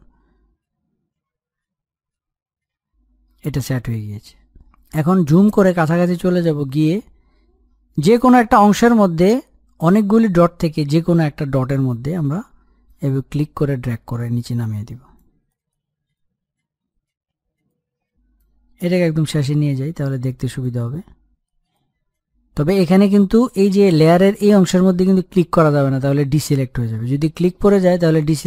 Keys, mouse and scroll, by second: 1.2-6.7 drag, 6.7-7.2 scroll up 1, 7.2-10.9 middle drag, 17.1 middle click, 17.7-22.8 drag, 22.8 scroll up 1, 23.1-25.4 middle drag.